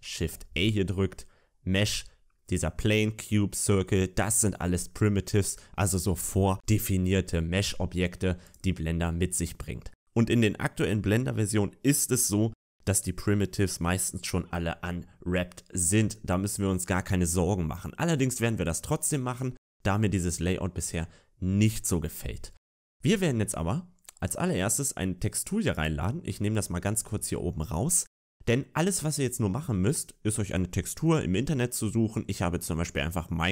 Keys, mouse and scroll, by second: 8.4 click, 9.6 middle click, 25.7 click.